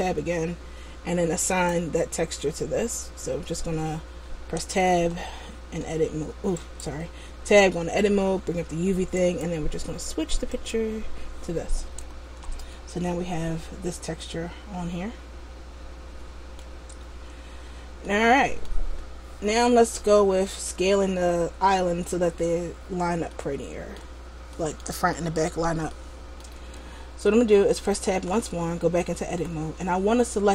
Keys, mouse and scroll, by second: 1.6 click, 9.4 click, 12.3 Tab, 12.8 middle click, 17.1-18.1 scroll up 1, 18.1 middle click, 18.1 scroll up 1, 23.5 middle click, 24.7 middle click, 25.3 middle click, 26.0 middle click, 26.8-28.3 scroll down 1, 28.3 Tab, 29.3 a.